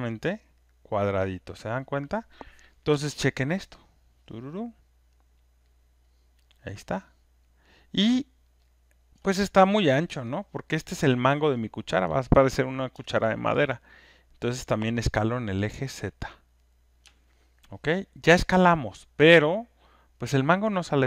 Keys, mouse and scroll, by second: 1.1-4.4 middle drag, 4.4 scroll, 4.9 alt+click, 5.6 alt+right click, 7.4 alt+click, 8.1 alt+right click, 8.5 alt+middle click, 9.1 alt+click, 11.3 alt+middle click, 11.3 alt+click, 11.3 alt+right click, 11.5 alt+right click, 11.9 alt+middle click, 13.6 alt+right click, 16.9 click, 18.1 alt+click, 18.6 alt+right click, 19.0 alt+middle click, 20.2 alt+click.